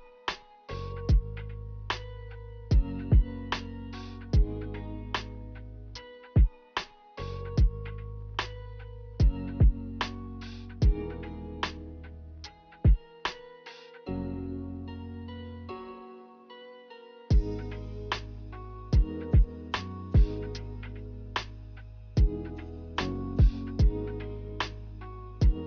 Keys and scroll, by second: 1.7-2.4 typing, 3.9 z.